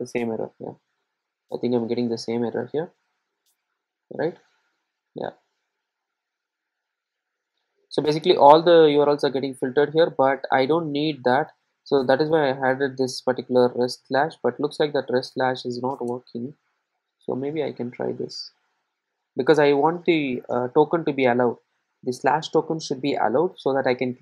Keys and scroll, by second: 12.9 super+z, 18.6 super+s.